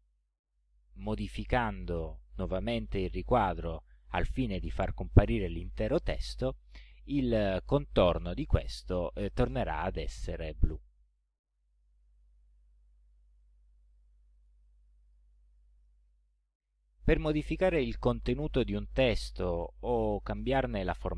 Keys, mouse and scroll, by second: 13.4 click, 15.1 click.